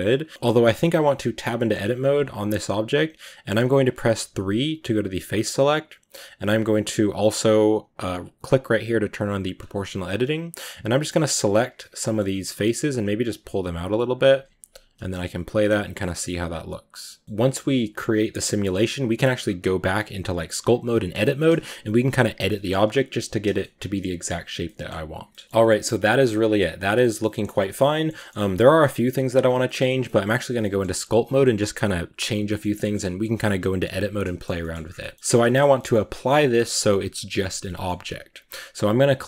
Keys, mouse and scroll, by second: 0.1-0.5 drag, 0.5 middle click, 0.8-1.4 scroll down 2, 1.4 middle drag, 1.7-4.1 scroll up 1, 4.1 3, 9.4 click, 10.5-11.6 right drag, 11.6 middle click, 12.3 g, 14.2 Tab, 14.9 space, 16.4-19.5 middle drag, 19.5-21.4 scroll down 2, 22.6-27.7 middle drag, 27.7 scroll up 1, 27.7-28.2 shift+middle drag, 28.2-29.1 scroll up 2, 28.5 middle drag, 29.1-29.6 scroll down 4, 29.6 shift+middle drag, 29.9 scroll up 2, 30.1-33.2 middle drag, 33.2-33.7 scroll down 2, 33.7-34.3 middle drag, 34.3-34.8 scroll down 4, 34.4 shift+middle drag, 34.8 middle drag, 35.1 scroll up 2, 35.3-39.2 shift+middle drag.